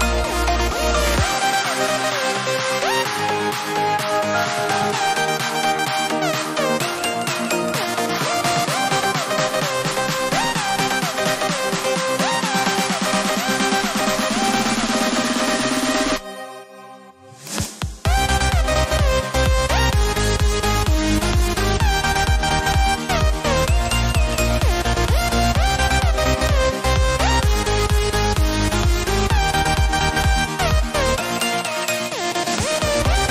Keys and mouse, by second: 2.9 click, 12.5 ctrl+Num_Lock, 12.7 ctrl+space, 12.9 ctrl+click, 13.2 ctrl+space, 15.7 alt+right click, 17.4 click, 26.4 click, 28.9-31.0 typing, 31.3 click.